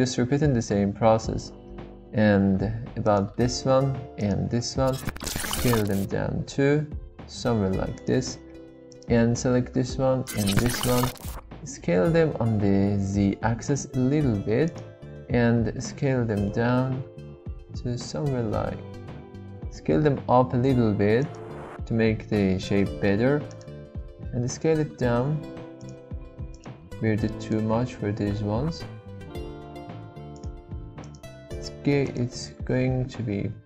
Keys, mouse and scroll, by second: 4.2 alt+shift+click, 5.3 s, 6.3 shift+z, 8.0 click, 8.9 alt+click, 10.2 alt+shift+click, 11.8 s, 12.3 z, 14.7 click, 16.0 shift+s, 16.2 shift+z, 23.5 alt+click, 24.2 s, 24.6 shift+z, 25.8 click, 26.5 alt+click, 28.3 shift+s, 28.5 shift+z, 31.0 alt+click, 32.0 alt+shift+click, 32.8 s, 33.0 shift+z.